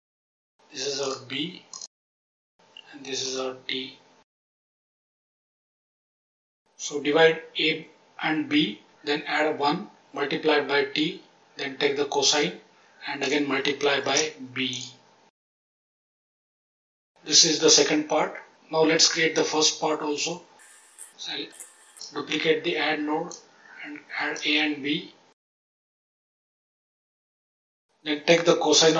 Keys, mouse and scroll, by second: 0.9 click, 1.6 click, 3.2 click, 4.4 click, 4.9 click, 13.1 click, 14.0 shift+d, 14.7 click, 16.2 click, 20.9 click, 21.5 shift+d, 21.9 click, 23.2 click, 24.0 click, 25.8-26.5 drag, 26.7-27.2 drag, 28.7 click.